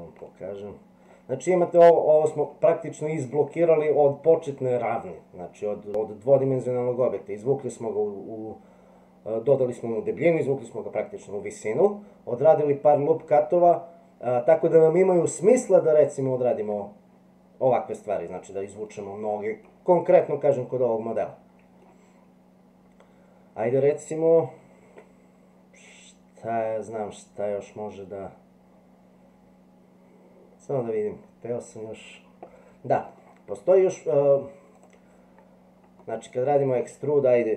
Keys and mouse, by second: 0.3 shift+middle click, 1.7 middle click, 6.1-7.2 middle drag, 13.3-15.0 middle drag, 18.9 middle click, 20.6-21.8 middle drag, 33.2 middle click, 34.8 click, 36.0 middle click.